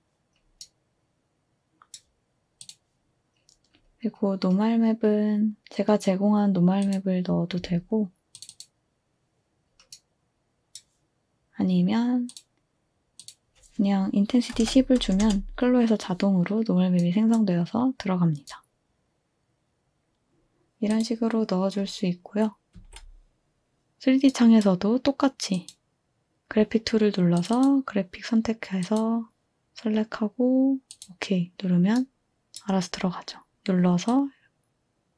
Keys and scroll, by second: 14.3-15.3 typing, 20.3 typing, 22.8 Delete.